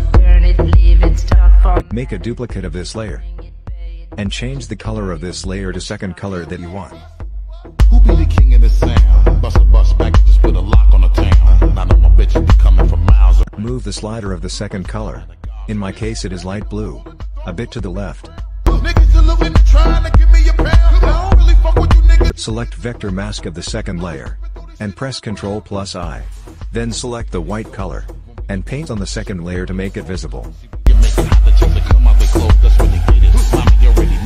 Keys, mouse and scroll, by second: 1.8 ctrl+j, 4.3 click, 8.0 click, 14.8 click, 22.8 click, 24.4 ctrl+i, 28.1 click, 31.4 click, 32.5 double click, 33.9 click.